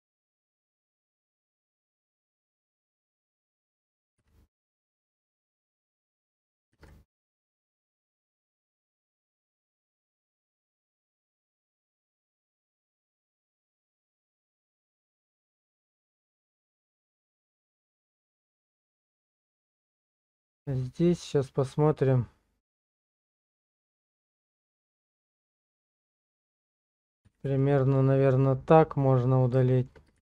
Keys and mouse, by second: 5.7 shift+middle click, 6.8 shift+z, 9.2-13.5 drag, 16.0 shift+middle click, 16.8 shift+middle click, 18.1 shift+middle click, 24.6-26.8 drag, 27.2 x, 29.0 middle click, 29.7 shift+middle click, 30.2 shift+z.